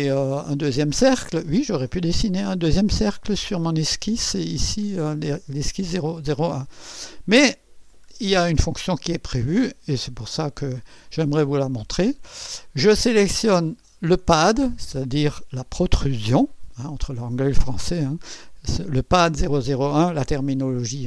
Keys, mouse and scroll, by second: 3.6 click, 7.6 scroll down 2, 8.1 scroll up 2, 8.7 right click, 9.6 click, 10.6 scroll up 1, 11.1 right click, 13.8 click.